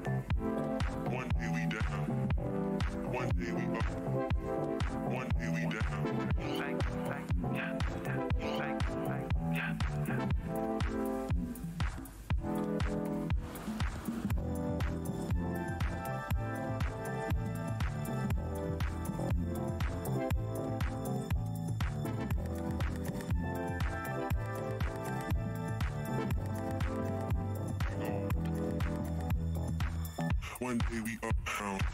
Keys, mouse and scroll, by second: 0.6 click, 2.5 w, 2.7 alt+scroll down 1, 3.4 alt+click, 3.6-5.1 typing, 5.2 click, 6.8 click, 7.5 z, 8.5 click, 11.8-12.2 alt+scroll up 2, 12.2 w, 13.1 scroll, 13.6 click, 14.6 alt+click, 15.3 click, 16.2 alt+click, 18.7 scroll down 1, 18.7 shift+w, 19.5 right click, 19.8 click, 20.0 scroll up 1, 21.6 click, 21.9 alt+click, 22.1 alt+scroll down 1, 22.5 e, 23.4 click, 24.4 scroll down 1, 25.1 alt+click, 25.3 alt+scroll down 1, 25.5 alt+scroll up 1, 28.3 alt+click.